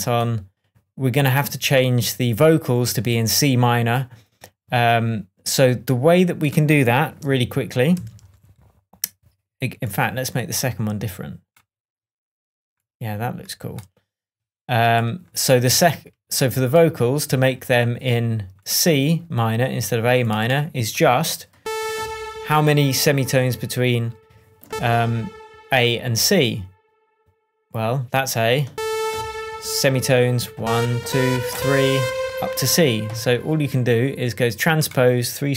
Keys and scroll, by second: 7.9 super+d.